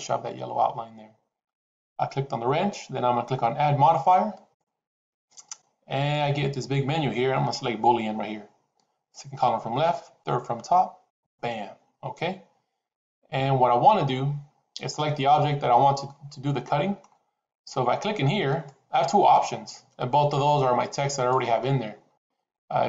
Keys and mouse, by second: 4.3-11.3 drag, 14.0-14.8 middle drag, 16.0 middle click, 18.5-21.1 drag, 21.5-22.8 middle drag.